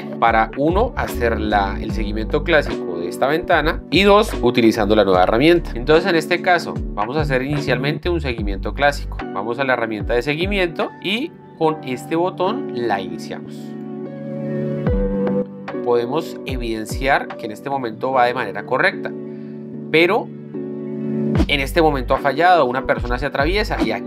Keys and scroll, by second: 7.1 z.